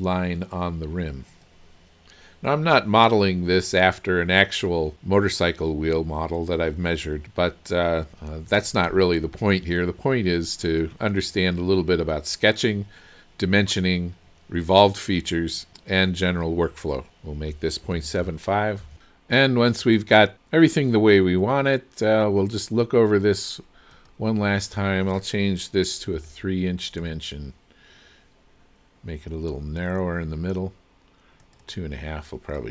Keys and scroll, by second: 17.6 KP_Decimal, 18.0 KP_7, 18.3 KP_5, 18.9 Return, 26.1 KP_3, 27.0 Return.